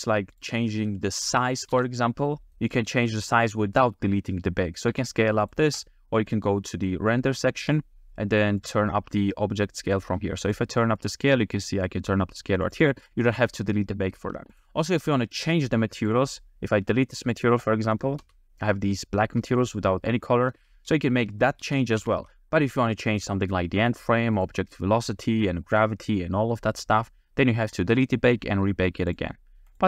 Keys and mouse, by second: 1.7 s, 4.9 s, 5.5 click, 5.8 click, 7.7 drag, 8.6 click, 10.5 click, 10.8 click, 11.2 click, 12.7 click, 12.8 click, 14.8 g, 15.3-17.4 drag, 17.9 middle click, 18.2 space, 20.1 space, 21.8 ctrl+z, 22.2 ctrl+z, 24.4 click.